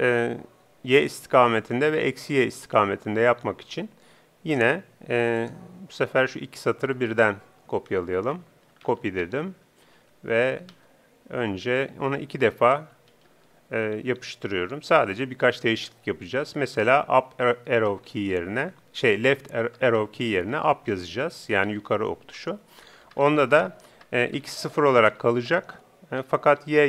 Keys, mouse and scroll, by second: 2.4-4.2 drag.